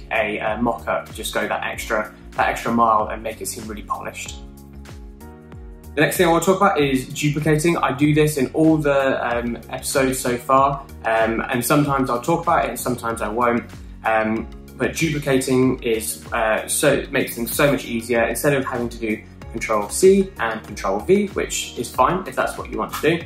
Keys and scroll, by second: 20.6 super+c, 21.4 super+v.